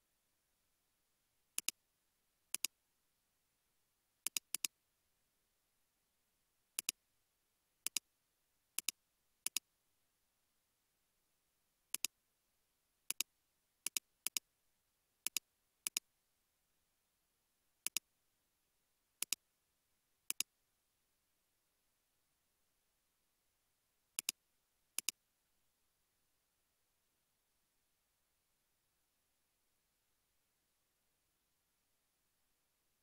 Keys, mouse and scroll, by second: 4.6 double click, 14.3 double click, 16.3 scroll down 1, 26.1 space.